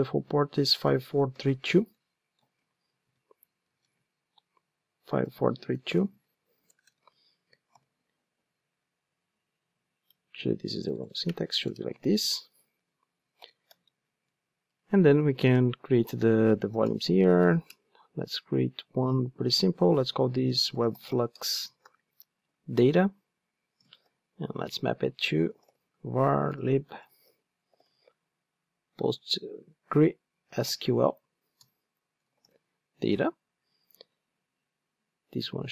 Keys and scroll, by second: 7.8 alt+super+l, 13.4 alt+super+l, 17.7 Return.